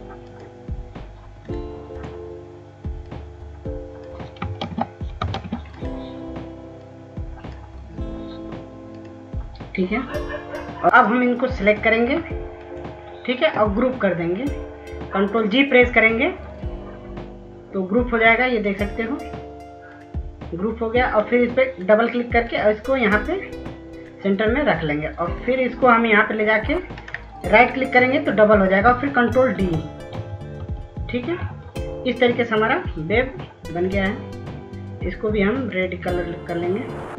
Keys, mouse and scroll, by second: 1.6 ctrl+space, 2.2 click, 3.4 scroll up 1, 4.1 click, 7.4 ctrl+space, 8.1 ctrl+space, 8.5 click, 10.7 scroll down 1, 11.0 ctrl+alt+e, 13.8 click, 15.5-30.1 shift+drag, 30.1 right click, 32.3 ctrl+d, 32.7 ctrl+d, 33.1 ctrl+d, 33.6 ctrl+d, 34.4 ctrl+d, 36.7 shift+click.